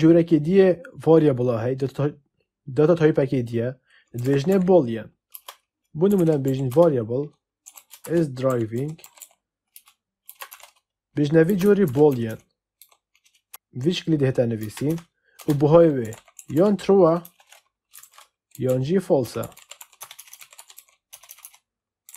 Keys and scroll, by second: 4.1-12.7 typing, 13.4 Return, 14.5-16.9 typing, 17.1 Return, 17.9 ctrl+shift+Left, 18.2-22.1 typing.